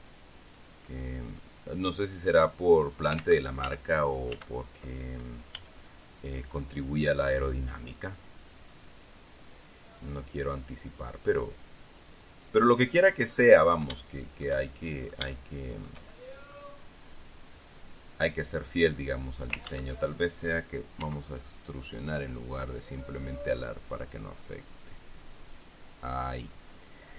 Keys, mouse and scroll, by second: 0.1 middle click, 1.9 middle click, 2.6-3.7 drag, 3.7 ctrl+z, 3.7 ctrl+middle click, 4.8 ctrl+z, 6.1 b, 6.5 click, 7.9 click, 9.1-10.7 drag, 12.8 right click, 13.2 middle click, 13.5-14.3 scroll up 1, 14.3 scroll up 1, 14.5-16.6 shift+middle drag, 17.0 middle click, 17.2-18.1 scroll down 1, 18.1-20.1 drag, 20.2 ctrl+z, 21.5 e, 26.8 click.